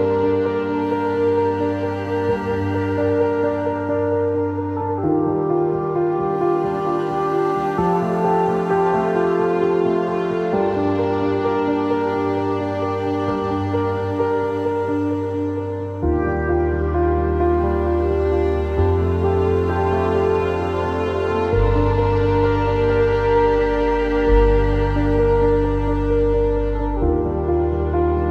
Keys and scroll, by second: 0.0 alt+x, 4.4 Delete, 10.1-10.8 typing.